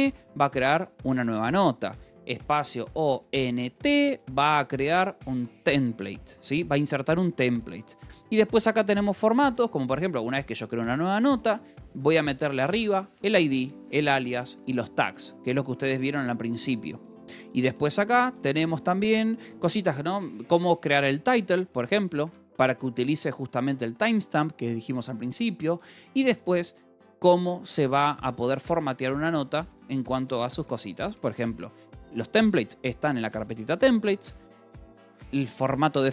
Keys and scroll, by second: 0.0-0.3 typing, 0.6 Escape, 1.5-3.6 typing, 4.6 Escape, 7.1-9.6 typing, 9.3 Escape, 10.6-12.0 typing, 15.0 Escape, 15.4 j, 16.5-19.2 typing, 20.3 k, 21.8 j, 22.6 shift+v, 22.7 Escape, 24.4 j, 25.9 k, 27.2 j, 29.6 Escape, 30.0 k, 31.5 shift+v, 34.2 Escape, 34.4 j, 35.1 shift+v.